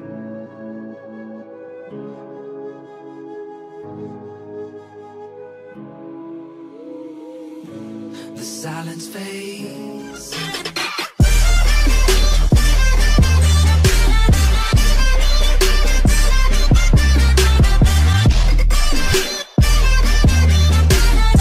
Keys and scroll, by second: 0.2 ctrl+shift+s.